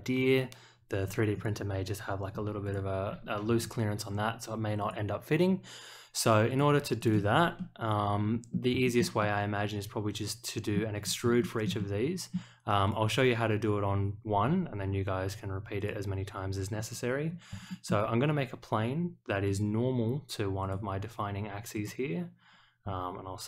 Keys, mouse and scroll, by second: 1.3 click, 2.6 click, 4.8 click, 6.4 click, 6.9 click, 7.5-8.5 middle drag, 8.8 shift+middle click, 9.2-10.7 middle drag, 10.9 scroll down 1, 11.4 shift+middle click, 11.7-12.3 middle drag, 12.8 click, 15.7 click, 17.2 scroll down 1, 17.6 shift+middle click, 19.4 click, 20.6 click, 21.7 click.